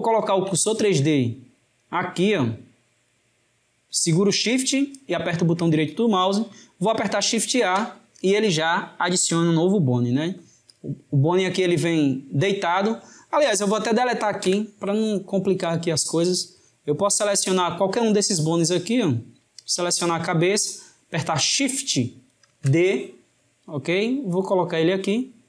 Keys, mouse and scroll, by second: 3.4-6.1 shift+right drag, 7.6 shift+a, 10.7 click, 18.9 click, 22.6 shift+d.